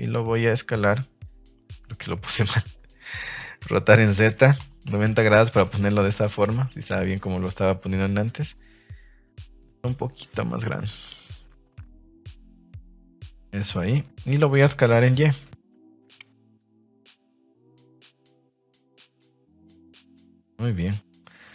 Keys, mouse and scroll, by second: 1.6 KP_3, 3.6 r, 4.5 z, 4.8 KP_9, 4.9 KP_0, 5.3 KP_Enter, 10.3 click, 12.3 click, 19.1 click.